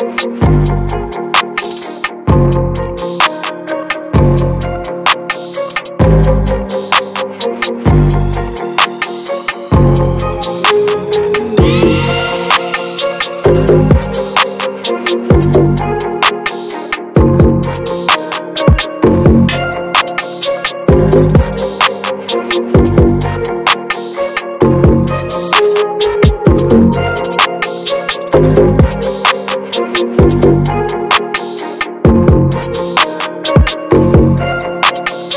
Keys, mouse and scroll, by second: 0.9 z, 1.0-2.4 right drag, 2.4 click, 2.8 middle click, 3.7 ctrl+z, 9.4-10.0 ctrl+scroll down 2, 10.0-10.3 ctrl+scroll up 1, 10.6-11.9 drag, 11.9 ctrl+z, 12.9-13.5 ctrl+scroll down 2, 13.5-14.2 ctrl+scroll up 1, 14.2-14.6 ctrl+scroll up 1, 16.8-19.4 drag, 19.4-21.2 middle drag, 21.2 ctrl+z, 23.6-30.4 drag, 30.4 ctrl+z, 30.7 middle click, 31.6 d, 32.3 middle click, 32.9 f, 33.5-35.3 drag.